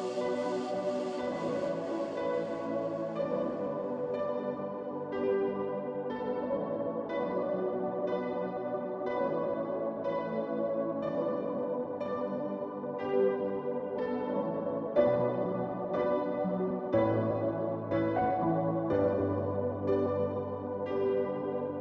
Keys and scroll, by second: 0.8 Return.